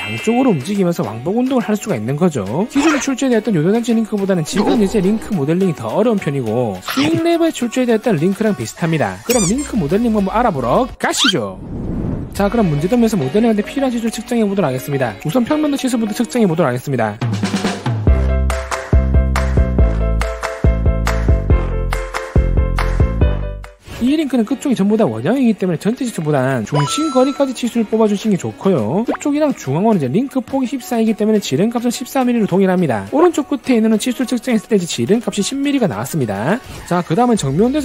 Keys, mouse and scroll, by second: 6.6-7.9 drag, 8.3-11.5 drag, 17.3 click, 17.4 click, 17.6 click, 17.8 right click, 17.8 click, 18.2 click, 18.4 click, 18.8 click, 18.8 middle click, 19.6 click, 20.0 click, 20.2 right click, 20.4 click, 20.6 click, 20.8 click, 21.0 w, 21.0 right click, 21.1 click, 21.3 click, 21.6 click, 21.9 click, 22.0 click, 22.6 click, 23.1 click, 23.3 right click, 23.4 click, 23.6 click.